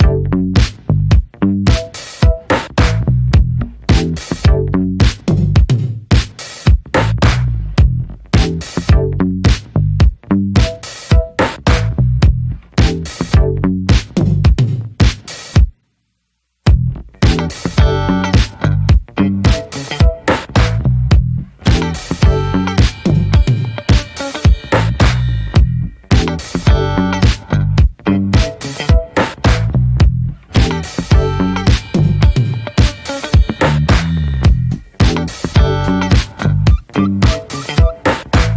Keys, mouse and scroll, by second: 0.1 click, 1.3-2.1 middle drag, 2.1 scroll up 1, 2.4-4.6 middle drag, 4.6 click, 5.0-5.8 middle drag, 5.8 scroll up 1, 6.1-6.5 middle drag, 6.5 3, 7.0 click, 7.8 middle click, 8.0 2, 8.6 click, 9.1-10.4 middle drag, 10.4 shift+click, 10.7-11.1 middle drag, 11.1 ctrl+b, 16.1 scroll down 2, 16.3-16.6 middle drag, 16.6 Tab, 16.7 click, 17.0 middle click, 17.2-17.6 scroll up 1, 17.6 ctrl+s, 17.9-18.2 middle drag, 18.2 ctrl+s, 18.4-18.7 middle drag, 18.7 Tab, 18.9-20.1 middle drag, 20.1 drag, 20.4 alt+shift+click, 20.7-21.2 middle drag, 21.2 ctrl+b, 25.0-26.0 middle drag, 26.0 Tab, 26.2 middle click, 26.5 Tab, 26.6-27.7 middle drag, 27.7 3, 28.1-29.3 middle drag, 29.7-31.1 middle drag, 31.1 click, 31.5-32.2 alt+shift+drag, 32.4-33.0 middle drag, 33.0 click, 34.1 click, 34.4-34.9 middle drag, 34.9 click, 35.9-36.7 middle drag, 38.2-38.5 middle drag.